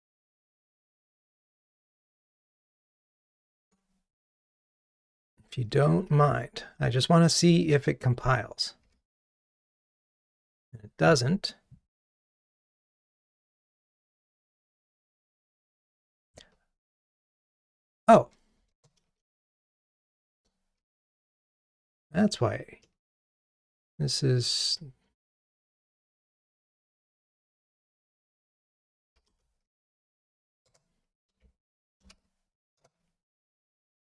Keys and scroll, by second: 3.7 ctrl+Tab, 5.9 super+/, 8.9 ctrl+r, 30.7 Return.